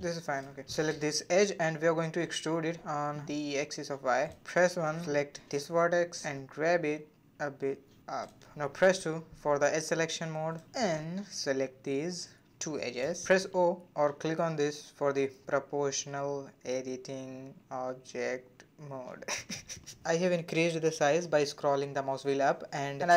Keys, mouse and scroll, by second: 1.0 click, 1.5-2.8 middle drag, 2.8 e, 4.1 1, 4.6 click, 5.4 g, 7.0 scroll down 1, 7.2-8.6 middle drag, 9.2 click, 9.8-11.1 middle drag, 11.1 click, 12.5 shift+click, 13.0-13.4 scroll down 2, 13.4-14.4 middle drag, 15.7 click, 15.8 g, 20.3-23.0 middle drag.